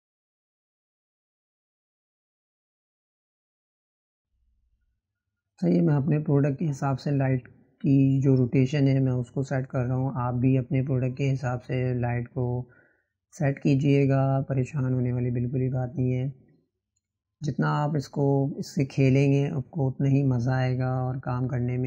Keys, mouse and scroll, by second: 1.7 click, 5.6-7.0 drag, 7.0-11.2 right drag, 11.2 n, 12.6-21.7 drag.